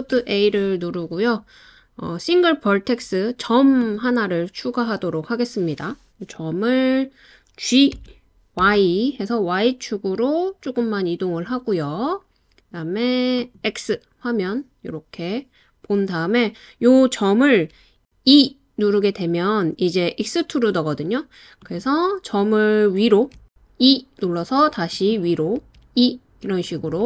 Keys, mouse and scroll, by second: 8.0 g, 8.6 y, 10.7 click, 13.5 click, 18.3 e, 21.6 click, 23.4 e, 24.9 click, 25.6 e, 26.6 click.